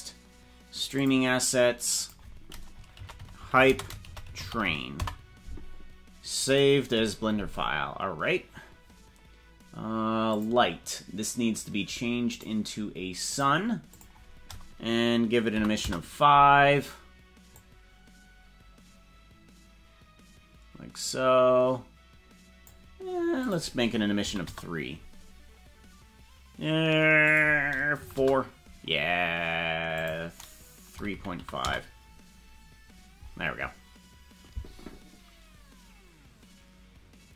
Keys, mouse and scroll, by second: 10.4 click, 12.4 click, 13.4 click, 14.0-16.4 drag, 17.7-22.7 drag, 23.5-25.3 drag, 25.9 scroll up 3, 27.3-28.9 drag, 29.9-32.2 drag.